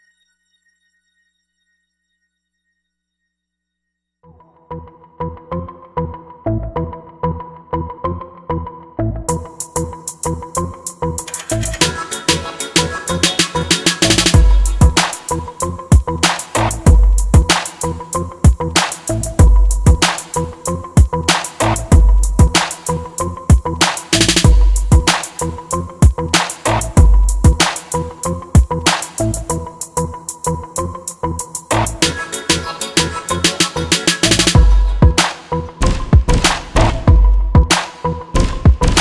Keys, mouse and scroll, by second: 13.7-15.6 right drag, 15.8-18.9 drag, 30.2-32.1 drag, 34.7-36.5 right drag, 36.9-38.8 drag.